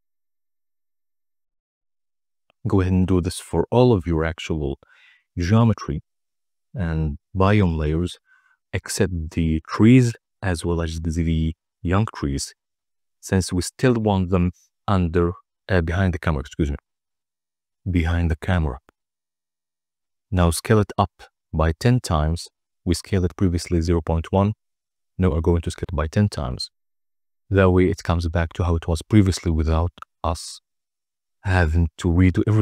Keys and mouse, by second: 0.0-0.6 drag, 2.1-4.1 drag, 6.0 click, 7.0 click, 7.7 click, 10.6-12.3 drag, 12.6-13.9 drag, 14.1 click, 14.2 click, 16.1 Tab, 17.0 s, 17.8 1, 20.1 0, 21.3 Return, 25.1 Tab.